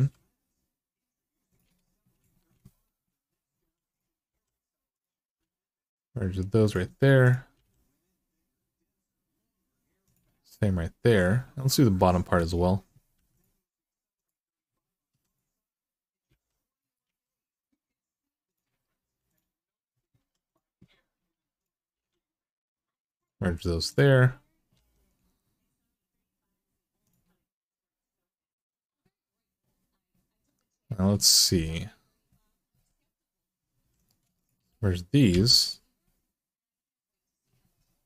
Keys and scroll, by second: 3.4-4.1 typing, 5.1 g, 7.3 g, 12.9 3, 14.9 2, 16.1-16.8 typing, 18.8 2, 20.0 1, 21.7 g, 24.5 g, 33.6 2, 35.1 f.